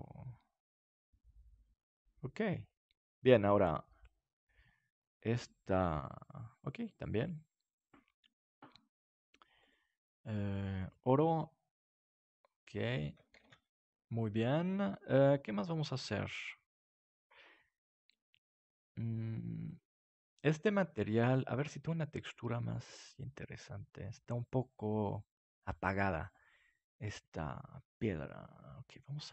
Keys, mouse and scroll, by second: 9.8-12.0 drag, 13.5 ctrl+s, 28.9 click.